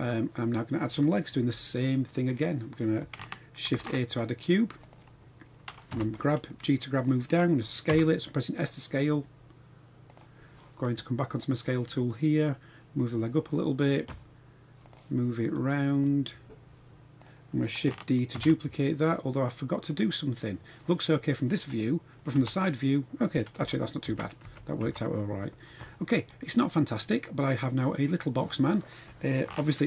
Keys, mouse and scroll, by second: 0.0 scroll down 3, 1.4 KP_1, 3.8 shift+a, 5.9 g, 7.8 s, 11.4 click, 12.5-13.8 drag, 14.8 click, 16.0-17.2 drag, 18.4 shift+d, 20.8 scroll up 1, 22.4 KP_3, 23.6 KP_1, 24.1 KP_3, 24.4 KP_1, 24.8 KP_3, 26.2-28.4 middle drag, 29.4-29.8 shift+middle drag.